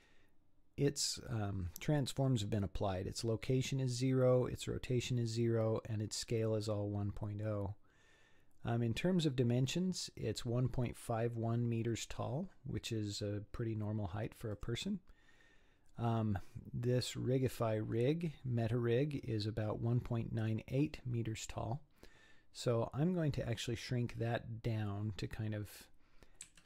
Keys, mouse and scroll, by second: 14.5 click, 23.7-24.6 scroll up 1, 26.5 s.